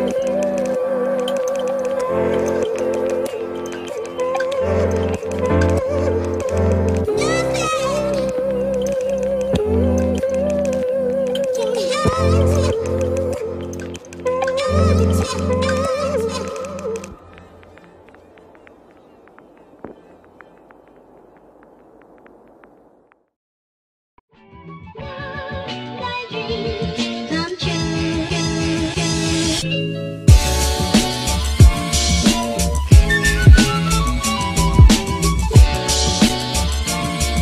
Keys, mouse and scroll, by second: 0.0 ctrl+-, 0.2 ctrl+=, 6.7 space, 11.4 space, 13.0 space, 15.2 space, 16.8 space, 17.3 space, 19.6 space, 22.6 space, 24.2 space, 30.7 space, 31.5 space.